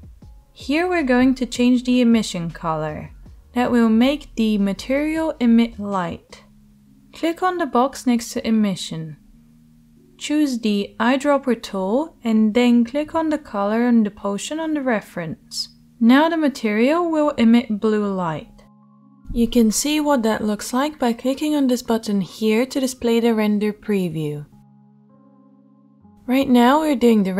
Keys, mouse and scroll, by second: 26.3 click, 26.3 middle click.